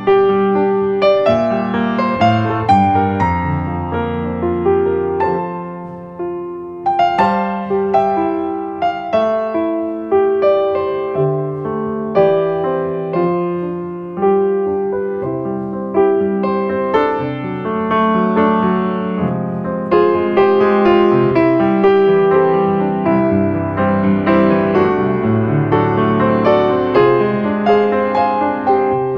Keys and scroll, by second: 1.3 space, 13.6 space.